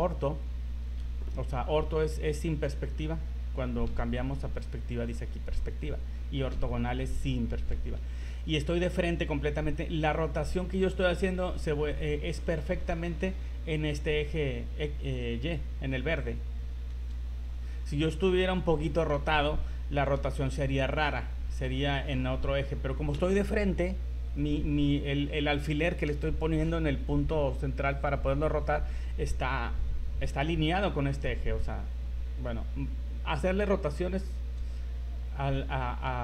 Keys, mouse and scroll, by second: 3.9 KP_5, 6.5 KP_5, 10.3 r, 17.1 r, 18.2 middle click, 20.3 r, 23.1 KP_1.